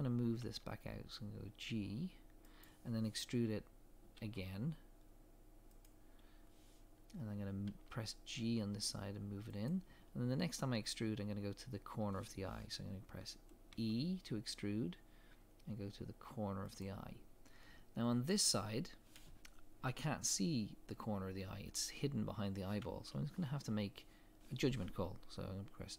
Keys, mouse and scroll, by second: 0.4 g, 4.2 e, 7.7 g, 13.7 e.